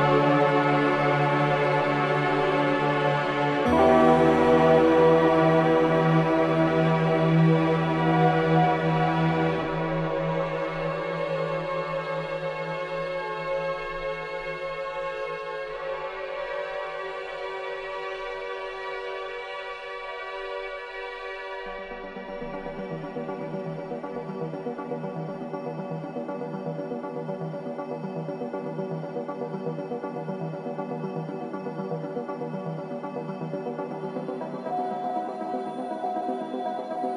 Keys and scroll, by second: 6.6 ], 7.9 ], 8.4 ], 9.0 ], 10.6 ], 12.7 ], 16.4 ], 24.7 Escape, 27.0 ], 33.8 ctrl+z.